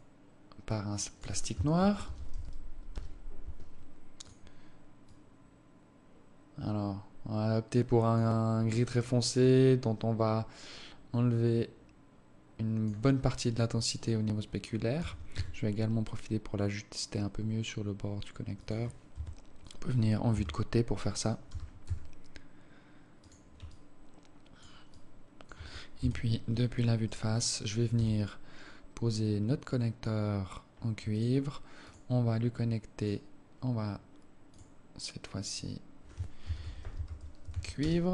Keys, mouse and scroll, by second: 0.0 click, 4.4 click, 9.7 click, 15.2 g, 19.4 KP_1, 20.6 KP_3, 21.8 g, 24.0 alt+click, 25.3 alt+click, 26.2 KP_1, 27.4 right click, 28.2 g, 32.1 click, 34.8 click, 35.8 click.